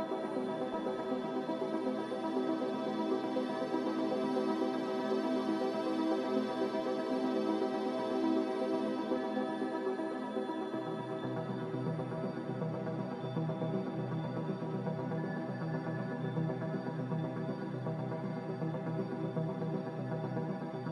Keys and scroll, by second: 14.8 n.